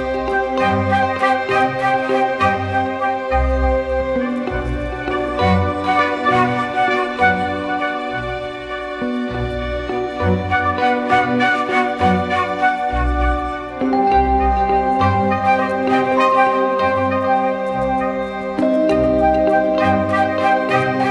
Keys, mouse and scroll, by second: 2.4 double click.